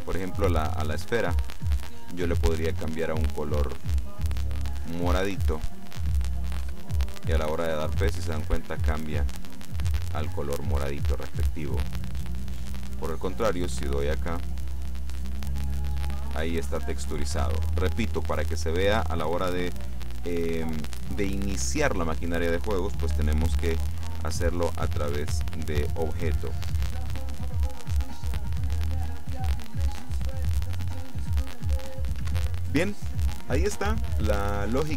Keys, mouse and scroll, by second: 1.4 click, 2.7-4.5 drag, 6.7 p, 10.0 Escape, 12.3 click, 13.4 click, 14.2-16.2 drag, 25.0 click, 27.0 p, 32.2 Escape.